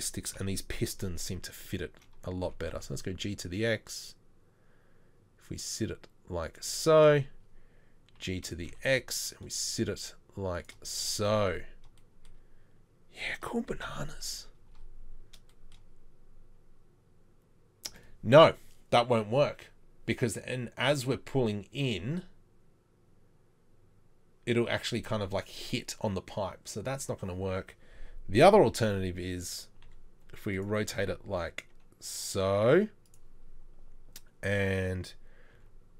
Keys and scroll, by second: 0.4 KP_7, 2.5 g, 8.2 g, 13.9 KP_3, 28.9 r, 29.9 r, 30.9 g, 35.6 g.